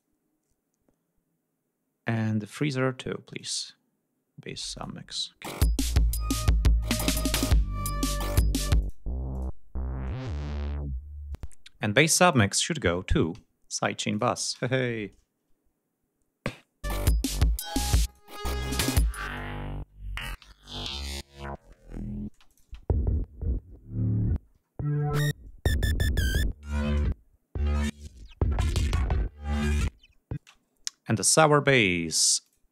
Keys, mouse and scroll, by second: 2.6 click, 3.4 click, 4.8 click, 5.5 space, 6.5-7.5 scroll up 2, 8.8 click, 9.4 click, 11.4 space, 12.3 click, 14.1 click, 14.6 space, 16.9 click, 17.8 click, 18.8 click, 19.3 click, 20.5 ctrl+scroll up 2, 21.6 scroll down 2, 22.3 space, 22.5 click, 23.0-23.7 ctrl+scroll down 5, 24.5-25.3 scroll down 4, 26.2-26.5 scroll down 2, 27.3 scroll down 2, 28.8 ctrl+click, 29.7 scroll down 2, 30.1-31.0 scroll up 4, 30.4 space, 31.0 scroll down 2, 32.5 click.